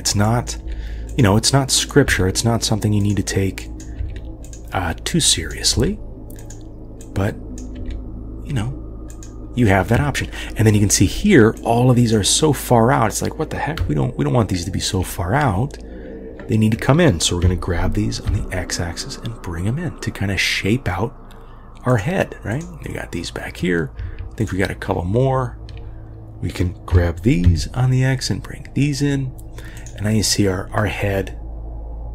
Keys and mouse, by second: 0.3 click, 0.6 g, 1.7 click, 2.1 g, 3.7 click, 4.0 g, 5.3 click, 5.7 g, 7.1 click, 7.8 g, 11.6-12.3 drag, 14.7 shift+click, 17.4 g, 22.6 click, 24.4 shift+click, 26.9 g, 30.8-32.1 middle drag.